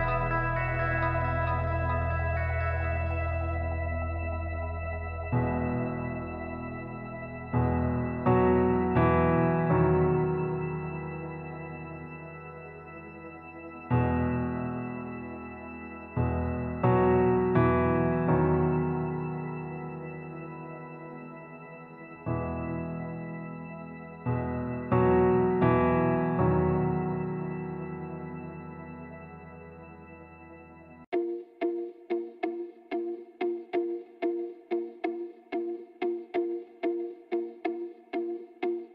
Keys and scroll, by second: 0.8 g, 1.3 g, 3.9 alt+z, 5.9 alt+z, 9.4 ctrl+z, 10.1 alt+z, 12.1 Tab, 13.9 ctrl+z, 15.2 ctrl+z, 16.0 Tab, 27.3 alt+z, 28.3 g, 30.0 alt+z, 30.8 z, 33.7 KP_1, 34.2 z, 36.0 y.